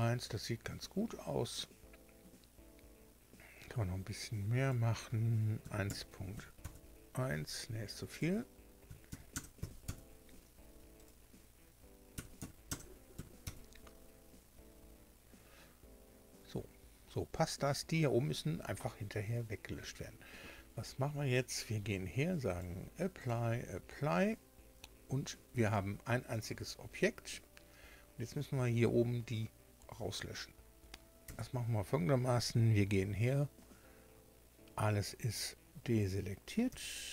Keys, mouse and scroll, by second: 4.6 click, 5.6 KP_1, 5.8 KP_Decimal, 6.3 KP_1, 6.6 KP_Enter, 8.1 click, 8.8 KP_1, 9.1 KP_Decimal, 9.3 KP_0, 9.5 KP_5, 9.8 KP_Enter, 10.9 click, 12.1 KP_1, 12.3 KP_Decimal, 13.1 KP_0, 13.1 KP_1, 13.4 KP_Enter, 22.4 click, 23.1 click, 25.3 Tab, 31.2 a, 36.6 b, 37.0-37.1 drag.